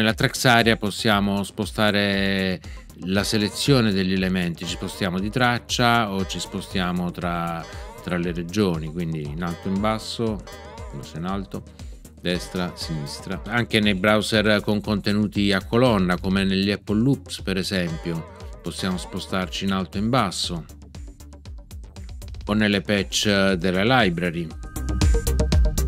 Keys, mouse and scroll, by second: 3.1 Down, 6.1 Right, 9.4 Down, 12.3 Right, 17.8 Down.